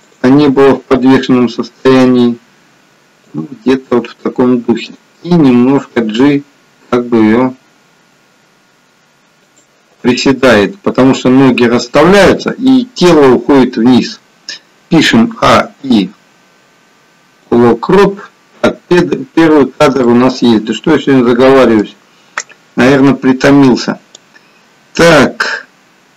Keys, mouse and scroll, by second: 0.0 click, 0.4 g, 4.8 click, 5.4 g, 15.2 a, 15.5 i, 19.3-20.1 scroll up 5, 20.1 middle click, 24.3 click.